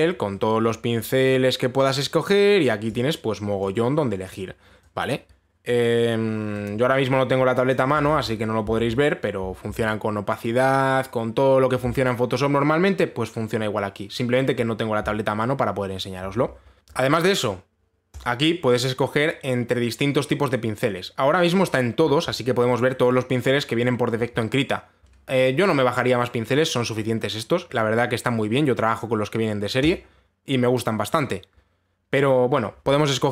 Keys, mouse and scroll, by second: 0.2-1.0 scroll down 7, 1.0-3.6 scroll, 3.6 click, 4.9 click, 6.3 click, 8.3 click, 8.7 ctrl+z, 9.4 ctrl+z, 10.3 ctrl+z, 18.8 click, 22.0 click, 22.6-23.7 scroll down 17, 23.7-24.5 scroll up 8, 30.5 click.